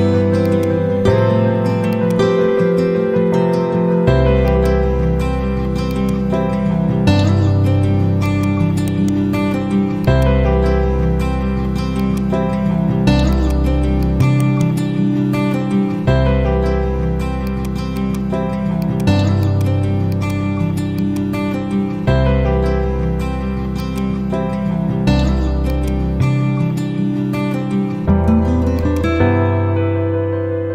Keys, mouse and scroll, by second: 4.5 click, 8.2 click, 8.8 right click, 10.0 shift+click, 10.4-11.4 typing, 11.9 click, 14.1 z, 14.3 right click, 15.6 F4, 17.4 click, 21.2-21.5 click, 22.0 ctrl+c, 23.7 click, 24.3 ctrl+v, 25.6-27.2 drag.